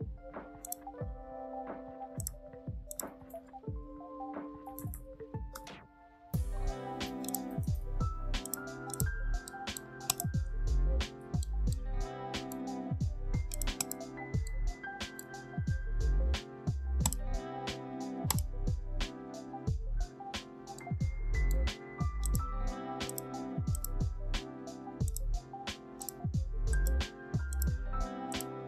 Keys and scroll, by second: 2.9 ctrl+a, 4.3-5.3 typing, 5.4 Return, 7.5 ctrl+shift+a.